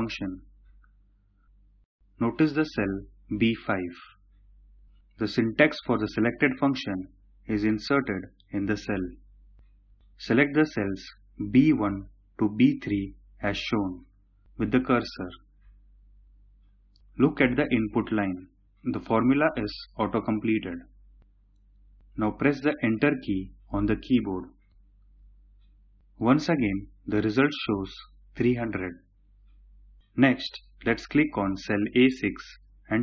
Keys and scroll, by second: 23.0 Return.